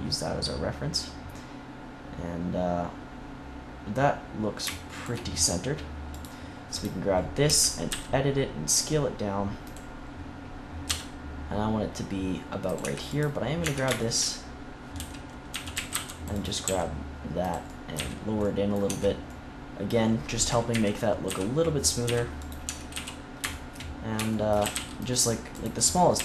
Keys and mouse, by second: 5.3 middle click, 6.0-8.6 drag, 7.4 Tab, 7.8 s, 8.8-9.9 drag, 10.0 click, 10.8 s, 12.7 Tab, 13.6 Tab, 14.9-16.6 typing, 17.6 middle click, 17.9 z, 18.1 middle click, 18.8 Tab, 20.6 KP_1, 21.2 z, 22.0 z, 22.6 Tab, 22.9 z, 24.6 a, 24.7 c, 26.1 a.